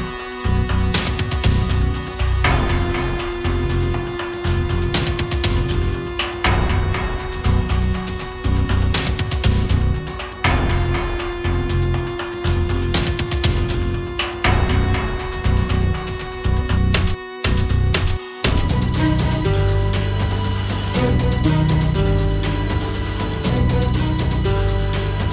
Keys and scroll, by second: 1.7 Down.